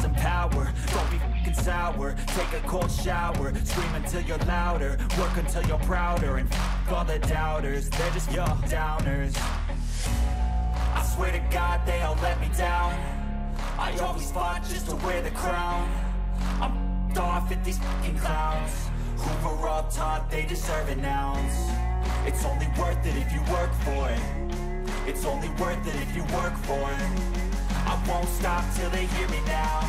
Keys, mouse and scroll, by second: 7.3 click, 12.2 ctrl+click, 16.7 Up, 17.0 Up, 17.2 Up, 17.4 Up, 17.6 Up, 18.7 Up, 22.1-22.7 scroll down 12, 22.9-23.4 scroll up 7, 28.2 right click.